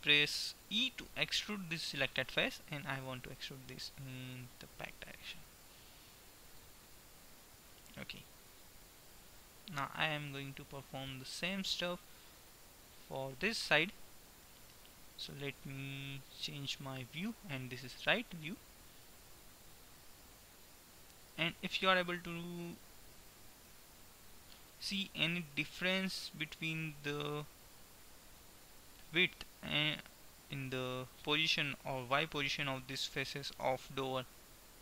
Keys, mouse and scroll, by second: 1.0 e, 11.0 Tab, 13.3 Tab, 16.7 KP_3, 24.0-26.3 middle drag, 34.3-34.8 middle drag.